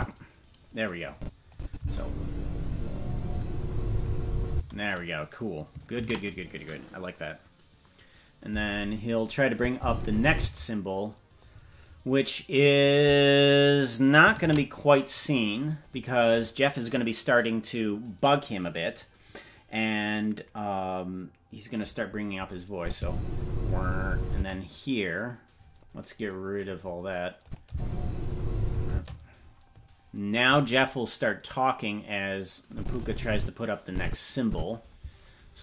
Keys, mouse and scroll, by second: 1.1 click, 1.5 click, 1.7 space, 4.5 space, 8.2 ctrl+s, 9.5 click, 9.7 space, 10.3 space, 16.7 ctrl+s, 22.7 click, 22.9 space, 24.3 space, 26.5 click, 27.4 click, 27.6 space, 28.8 space, 32.6-34.5 drag.